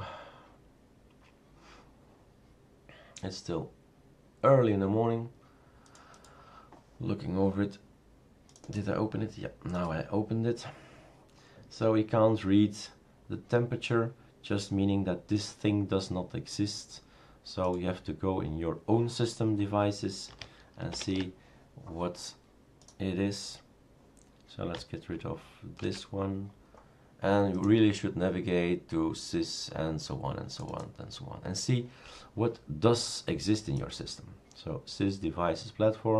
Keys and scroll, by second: 20.9 shift+super+Return, 25.9 shift+super+q.